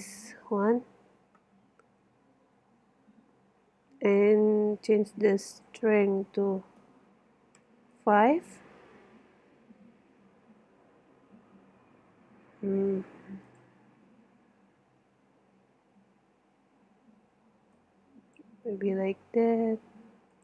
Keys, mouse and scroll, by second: 3.7 middle click, 5.4-7.4 middle drag, 12.0 middle click, 13.5 click, 15.4 middle click, 16.5-17.6 middle drag, 17.8-20.2 middle drag.